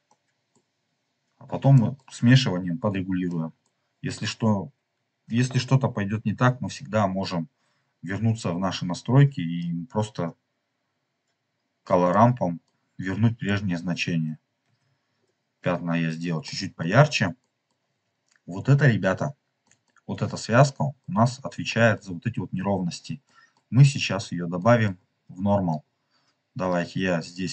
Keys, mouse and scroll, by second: 0.0 middle click, 0.7 scroll up 2, 1.7 middle click, 2.7 scroll down 2, 3.3 middle click, 8.5-9.5 scroll up 3, 9.5-12.0 drag, 12.0 middle click, 13.2 middle click, 13.3 scroll down 2, 14.6 ctrl+z, 15.1 scroll down 2, 16.4 middle click, 17.3 middle click, 19.5 middle click, 20.0-20.4 scroll down 3, 20.6 middle click, 21.2-21.5 scroll down 2, 21.6 middle click, 23.2 middle click, 24.0-24.5 scroll up 3, 24.5 middle click, 24.9 scroll up 2, 25.9 scroll up 1, 26.6-27.5 drag.